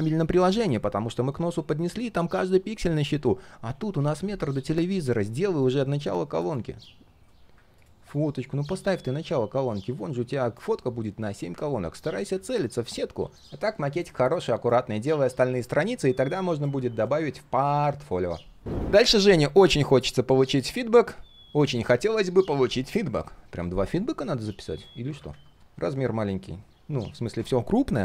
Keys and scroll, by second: 4.2 ctrl+z, 25.2 ctrl+\.